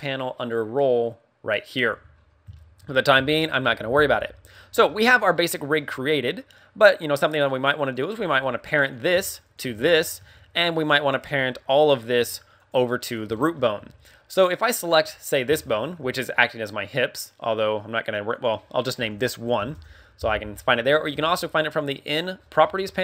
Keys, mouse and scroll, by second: 1.8 KP_1, 2.0-2.4 scroll down 3, 2.4 shift+middle click, 2.9 scroll up 1, 3.3 shift+middle click, 4.7 a, 4.8 middle click, 5.4 middle click, 5.8 scroll up 2, 6.8 right click, 7.8 right click, 8.1 g, 8.8 right click, 9.4 shift+right click, 9.8 shift+middle click, 10.1 a, 10.8 right click, 11.1 g, 11.7 right click, 12.2 a, 12.4 right click, 12.9 middle click, 13.3 middle click, 13.7 a, 14.6 right click, 15.5 shift+middle click, 18.3 click, 21.0 n, 22.0 scroll up 2, 22.6-23.0 scroll up 13.